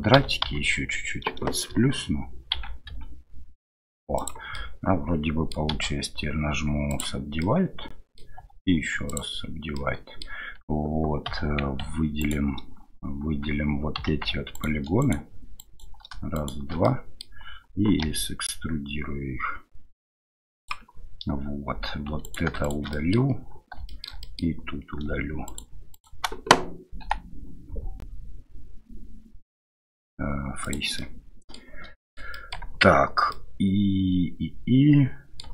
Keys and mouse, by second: 0.4 a, 2.5 s, 4.5-5.6 middle drag, 7.4 middle click, 8.4 w, 9.8 middle click, 11.3 2, 12.2 alt+right click, 14.0 3, 14.5 alt+click, 15.0 alt+click, 15.6 alt+click, 16.4 alt+shift+click, 16.8 middle click, 18.0 e, 22.2 right click, 22.6 shift+right click, 22.9 middle click, 23.9 shift+middle click, 24.2 middle click, 25.5 shift+click, 25.9 shift+click, 27.0 Delete, 31.0 middle click, 32.0 shift+middle click, 32.3 middle click, 33.3-35.4 middle drag, 35.4 Tab.